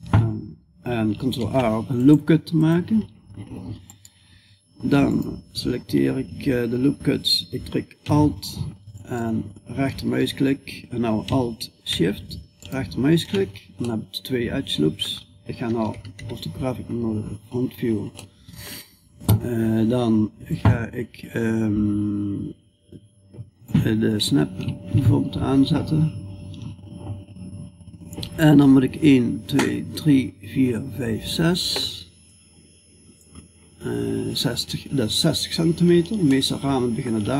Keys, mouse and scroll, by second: 0.8 ctrl+r, 13.3 middle click, 15.3 KP_5, 15.6 KP_1, 16.8-19.9 middle drag, 19.9-23.1 drag, 31.7-37.3 drag.